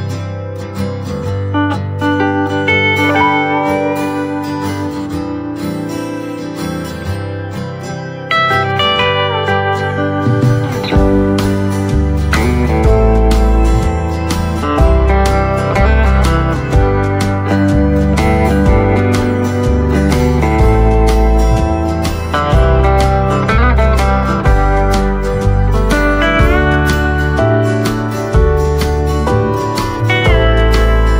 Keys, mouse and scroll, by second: 2.1 ctrl+z, 2.3-2.7 scroll up 1, 2.9 click, 4.5-5.0 scroll down 1, 5.0 click, 5.3 right click, 6.8 click, 15.4 right click, 17.3 click, 18.4 right click, 19.2 scroll up 1, 19.5 click, 20.8-23.7 right drag, 23.7 scroll up 1, 24.1 right click, 24.7-25.1 scroll down 1, 25.1 right click, 25.7-26.0 scroll up 1, 26.0 click, 26.5-27.1 scroll up 1, 27.6-30.9 drag.